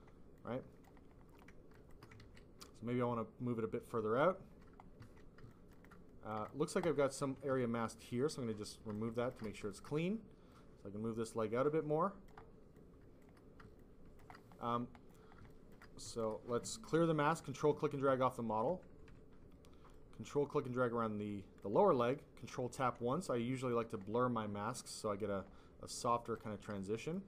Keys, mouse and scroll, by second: 0.3 click, 1.6 shift+click, 1.8 shift+click, 2.1 click, 2.9 ctrl+z, 2.9 click, 4.9 ctrl+z, 5.3 ctrl+z, 5.4 alt+click, 5.8 alt+click, 6.7 click, 7.5 ctrl+alt+click, 8.6 click, 9.2 shift+click, 9.5 alt+click, 9.6 alt+double click, 10.4 click, 12.7 click, 13.7 alt+click, 15.7 click, 16.9 ctrl+click, 19.3 ctrl+q, 19.8 ctrl+click, 22.3 ctrl+click, 23.0 ctrl+click, 24.6 click, 24.9 click, 26.2 alt+click, 26.7 alt+click.